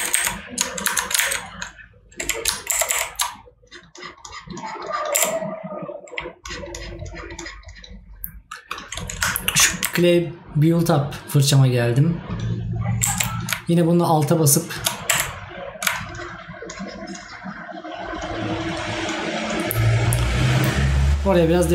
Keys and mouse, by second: 9.4 right click.